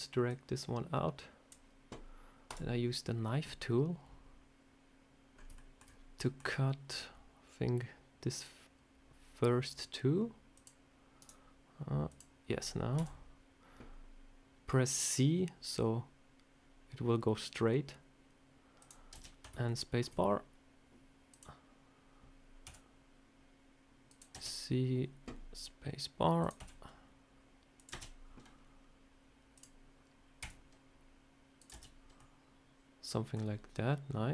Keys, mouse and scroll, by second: 0.2 click, 2.4 click, 5.2 scroll up 3, 5.4 shift+middle click, 5.7 scroll down 2, 6.1 shift+middle click, 10.4 click, 12.0 click, 19.6 shift+middle click, 21.2 click, 26.3 click, 32.1 middle click, 34.2 click.